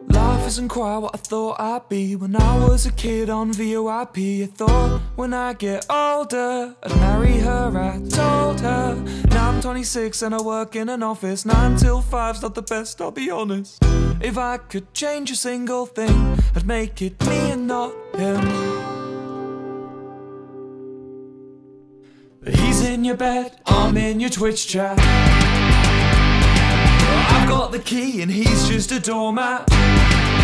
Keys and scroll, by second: 25.4 F9.